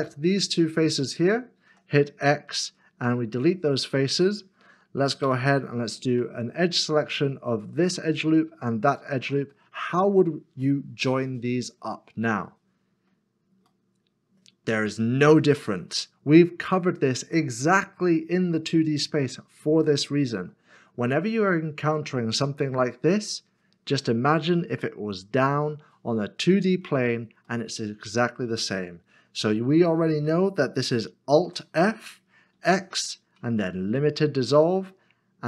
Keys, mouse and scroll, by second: 0.8 shift+click, 5.2 2, 7.5 2, 7.6 alt+click, 8.6 alt+s, 8.9 alt+shift+click, 9.8 middle click, 27.5 middle click, 31.4 alt+f, 33.1 x.